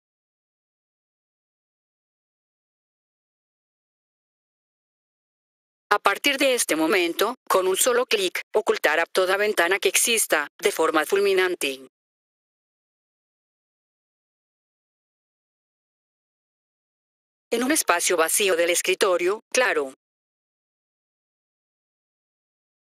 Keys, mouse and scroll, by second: 5.3 F4, 5.8 click, 12.3 click, 13.5 click, 17.1 F4, 17.4 click, 20.0 click, 22.1 F4, 22.5 click.